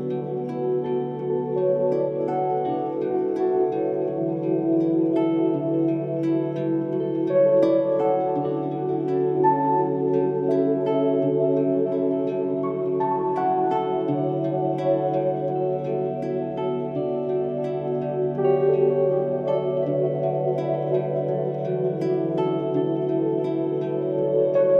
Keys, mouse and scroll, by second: 3.8-9.7 drag, 10.0-20.2 drag, 20.2 right click, 20.7-24.0 drag.